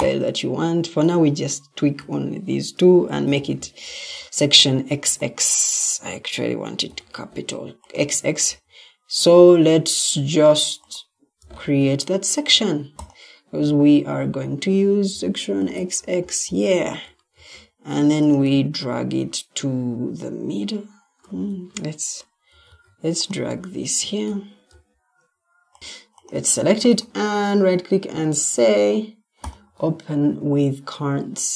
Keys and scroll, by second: 3.0 x, 6.8 x, 17.3 ctrl+d, 21.4 Escape, 22.6 ctrl+d, 25.8 Escape.